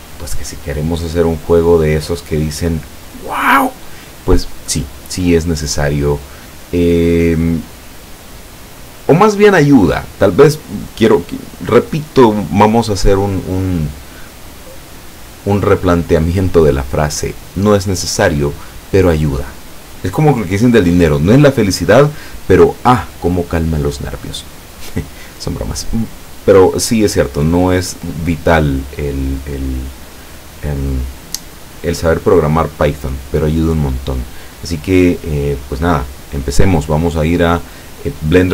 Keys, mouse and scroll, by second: 7.4-10.6 drag, 36.9 click.